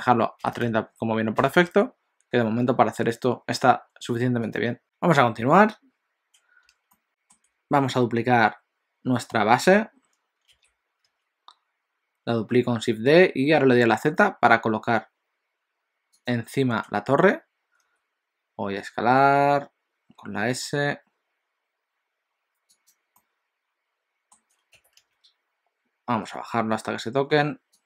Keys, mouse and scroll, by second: 4.6 click, 6.9 shift+middle click, 10.6 shift+d, 23.2 middle click, 24.8 g.